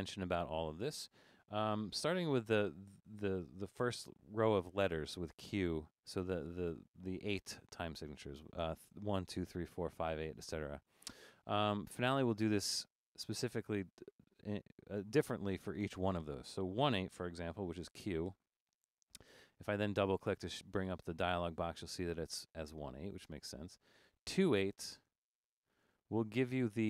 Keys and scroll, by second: 17.9 q, 18.4 q, 24.3 w, 24.7 w, 24.8 w, 24.9 w.